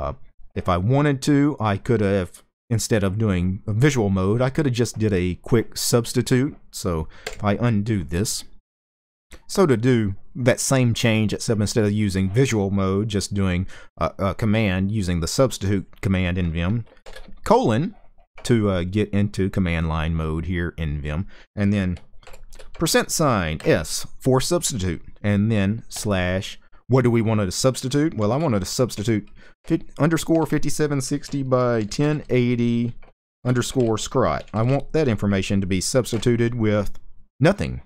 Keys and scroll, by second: 6.9 typing, 16.7 typing, 21.9 typing, 23.2 typing, 25.6 typing, 27.9-31.8 typing, 33.0-34.3 typing, 35.8 typing.